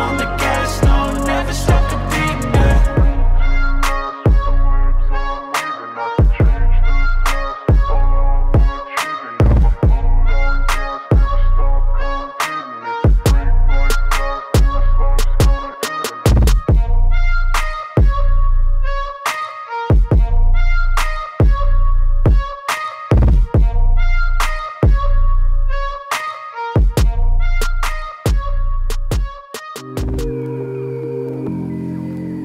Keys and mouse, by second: 0.2 click, 1.2 click, 2.4-2.7 drag, 3.5 drag, 4.5 click, 6.1-6.4 middle drag, 7.3 space, 11.9-13.1 drag, 13.9-15.2 drag, 15.4 i, 16.2-17.8 drag, 18.3-20.1 drag, 21.1 click, 21.3 space, 26.5 space, 26.7 middle drag, 27.2 click, 27.4 Delete, 27.8 click, 28.2 click, 28.8-29.8 drag, 30.7-31.9 drag.